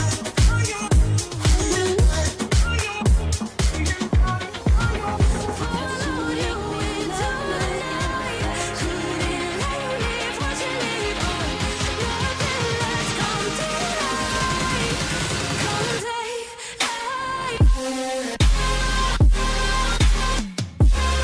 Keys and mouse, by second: 0.5-2.2 middle drag, 0.5 i, 1.4 ctrl+z, 4.7-6.4 Left, 6.4 space, 7.1 space, 7.6-8.1 Right, 7.6 middle click, 8.1-8.6 Left, 8.9 Left, 12.2 Left, 14.2 i, 14.9-15.4 Left, 15.6 space, 17.2 space, 18.2 space, 19.3 space, 19.9 space, 21.0 space.